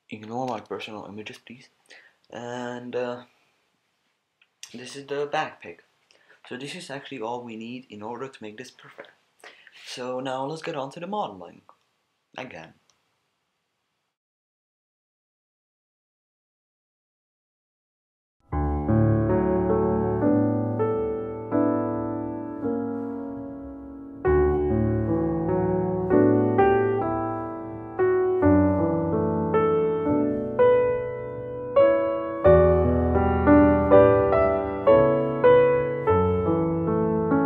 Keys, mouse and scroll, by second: 0.0-13.6 middle drag, 14.4-27.5 typing, 15.1 Tab, 15.5 click, 16.6 ctrl+z, 17.1 Tab, 17.2 Tab, 18.5 ctrl+z, 18.9 Tab, 19.3 Tab, 19.7 click, 20.1 click, 20.4 click, 20.6 Tab, 20.8 Tab, 21.6 middle click, 22.5 Tab, 24.3 Tab, 24.7 click, 25.6 Tab, 25.7 Tab, 26.5 Tab, 26.7 Tab, 26.9 click, 27.2 Tab, 27.3 click, 27.7 click, 28.2 click, 28.7 click, 28.8-30.6 typing, 29.3 click, 29.3 Tab, 29.6 click, 29.8 Tab, 29.9 Tab, 29.9 click, 30.1 click, 31.2 Tab, 31.8 Tab, 31.9 click, 32.0-37.4 typing, 32.1 drag, 32.4 drag, 32.7 click, 33.0 click, 33.1 Tab, 33.8 click, 34.6 click, 35.2 Tab, 35.4 click, 35.6 click, 35.9 Tab, 36.4 click, 37.2-37.4 drag.